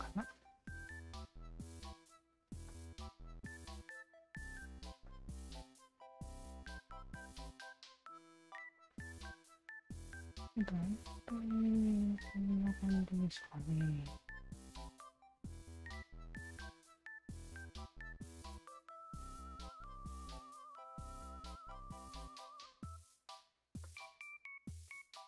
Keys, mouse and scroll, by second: 0.5-2.4 alt+drag, 2.7 alt+click, 3.8 alt+click, 5.0-6.5 alt+drag, 6.7-9.9 alt+drag, 10.1 alt+click, 10.5 alt+middle click, 10.8 alt+right click, 11.4-15.5 alt+drag, 16.4 alt+click, 17.9 alt+click, 18.5 shift+click, 19.7-20.9 shift+drag, 21.2 click, 22.0 ctrl+z, 22.6 alt+click, 23.9 alt+click, 24.3 alt+click.